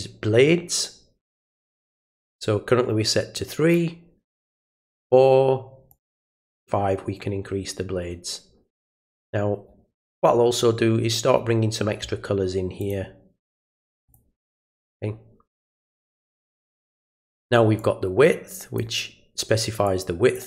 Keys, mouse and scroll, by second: 3.7 click, 5.9 click, 12.8 click, 14.0 click, 17.8-18.7 drag, 19.8-20.3 drag.